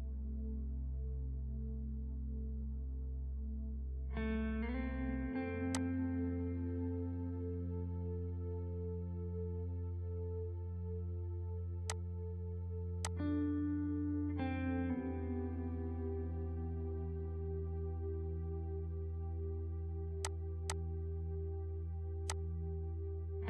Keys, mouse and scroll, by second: 6.0-10.6 drag, 10.6 ctrl+space, 11.9 click, 13.0 shift+click, 14.0 click, 14.7 right click, 15.6 click, 19.5-20.0 scroll down 1, 20.2 click, 21.0-22.3 scroll up 1, 22.6 ctrl+click, 22.9 ctrl+right click.